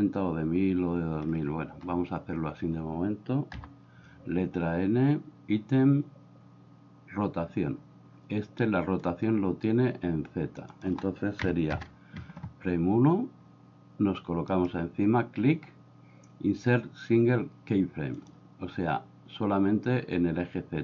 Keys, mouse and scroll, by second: 3.5 n, 9.1-11.8 drag, 14.6-18.3 right drag.